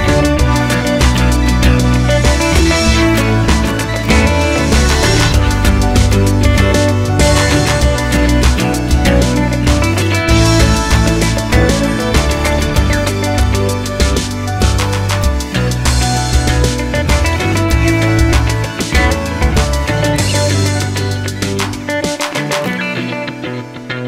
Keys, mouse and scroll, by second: 1.1 z, 1.9 click, 2.4-5.3 drag, 3.2 z, 6.0 g, 8.9-9.2 scroll down 1, 9.2-11.0 scroll up 1, 11.0 Tab, 12.3 shift+a, 18.1 KP_Enter, 18.2 Tab, 20.2 click, 20.4 g, 21.9-23.8 drag, 22.5 g.